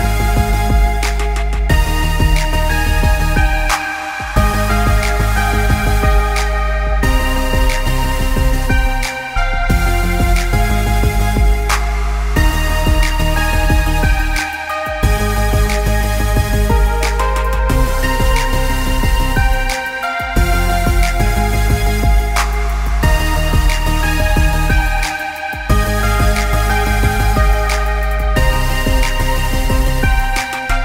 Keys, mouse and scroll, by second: 0.2 middle click, 2.4-3.3 scroll down 2, 2.6 middle click, 6.1 r, 9.7 middle click, 10.6 g, 13.5 middle click, 14.0 middle click, 14.4 middle click, 15.1 r, 16.7 middle click, 17.6 g, 18.7 middle click, 19.7 g, 21.5 middle click, 22.6-23.2 scroll up 4, 22.9 middle click, 23.5 scroll down 1, 23.7 middle click, 24.2-24.9 scroll down 4, 24.4 middle click, 26.1-27.1 scroll up 3, 26.4 middle click, 27.1 middle click, 27.5 click, 28.2 middle click, 29.1 Tab, 29.4 middle click, 29.9 Tab, 30.3 middle click, 30.7 click.